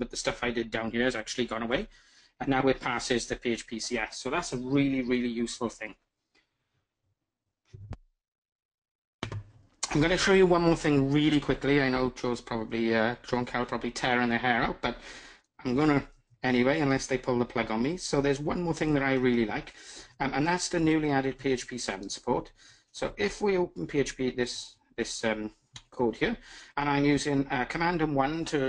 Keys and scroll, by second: 18.9 alt+super+`, 20.8 super+1, 25.4 super+1.